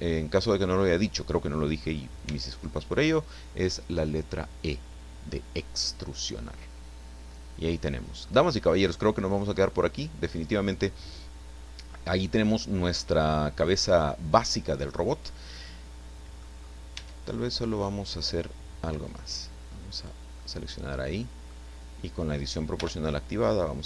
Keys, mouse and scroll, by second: 2.7 Tab, 2.7-5.5 middle drag, 5.9-6.2 scroll down 1, 6.3-8.3 middle drag, 8.3 scroll down 1, 9.3 click, 10.0 click, 10.6-11.8 middle drag, 11.9 scroll up 1, 12.1 scroll down 1, 12.6-16.6 middle drag, 16.6-17.0 scroll up 1, 16.9 Tab, 17.3 middle click, 19.0 click, 19.9 right click, 20.4-21.6 middle drag, 22.8 o.